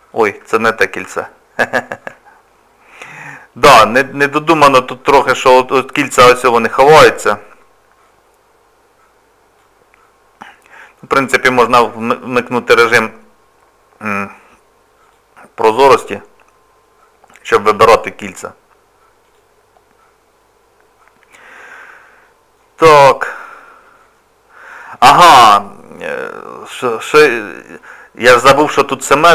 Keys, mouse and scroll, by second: 1.1 ctrl+z, 1.3-1.9 scroll down 3, 1.9 shift+middle click, 2.3-4.0 scroll up 3, 4.0 click, 5.0-5.5 scroll up 4, 6.5 click, 8.0 click, 10.0 scroll down 1, 10.0 scroll up 1, 10.6-11.1 scroll down 1, 11.2 scroll up 1, 11.2-13.1 scroll down 6, 15.1 click, 19.2 click, 20.1 scroll down 2, 20.7 scroll down 1, 21.5 click, 22.2 middle click, 23.0 middle click, 26.2 middle click, 26.8 scroll down 2, 26.9-27.6 scroll up 3, 29.0 shift+middle click.